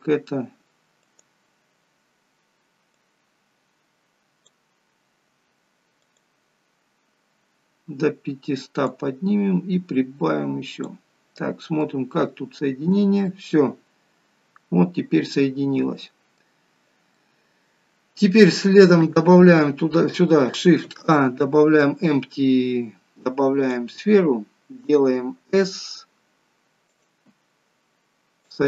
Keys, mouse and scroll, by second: 1.0 click, 2.9 click, 6.1 click, 8.9 click, 11.8 middle click, 17.1 middle click, 19.0 KP_3, 20.8 shift+a, 28.5 click.